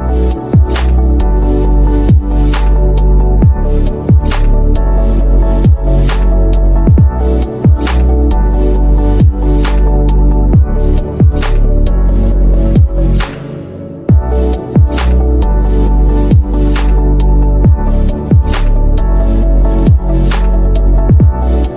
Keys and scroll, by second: 6.1 Escape, 8.9 BackSpace, 20.9 Escape.